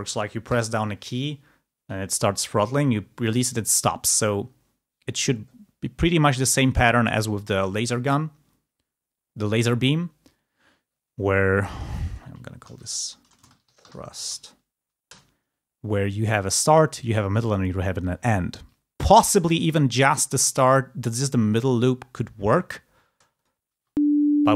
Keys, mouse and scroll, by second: 13.4-14.4 typing, 15.2 Return, 19.4 g, 20.7-22.0 drag, 23.3-24.5 drag, 24.5 space.